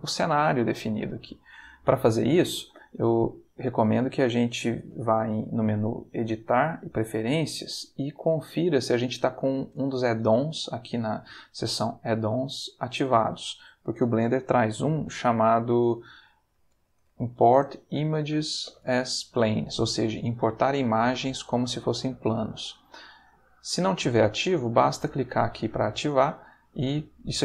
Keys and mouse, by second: 5.9 click, 6.8 click, 8.1 click, 8.9 click, 11.0 click, 13.2 click, 16.2-18.8 typing, 20.2 click, 23.2 click, 24.7 click, 26.4 click.